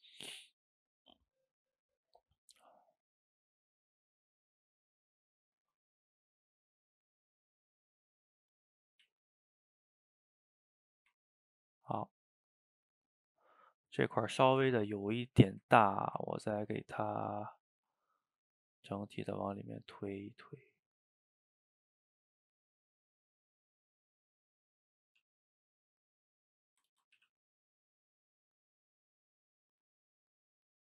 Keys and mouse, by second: 0.4-1.4 drag, 1.4 middle click, 2.1-3.5 drag, 3.5 middle click, 4.2 click, 4.8-5.9 middle drag, 5.9-7.0 drag, 7.0 middle click, 7.7-8.7 drag, 8.7 middle click, 9.1 ctrl+z, 9.3 middle click, 9.7-10.9 drag, 10.9-17.0 ctrl+middle drag, 17.0 f, 17.5 shift+middle click, 18.2-20.5 drag, 20.5-22.0 middle drag, 22.0-23.8 drag, 23.8-25.1 middle drag, 25.1 f, 25.5 middle click, 26.0-27.0 drag, 27.0 ctrl+z, 27.2 f, 27.8 middle click, 28.4-30.5 drag, 30.5-30.9 middle drag.